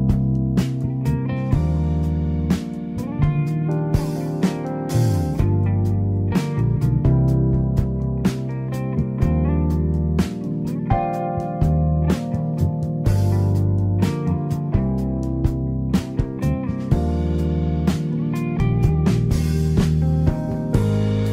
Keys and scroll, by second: 5.7 Escape, 7.7 Escape, 15.5 Escape.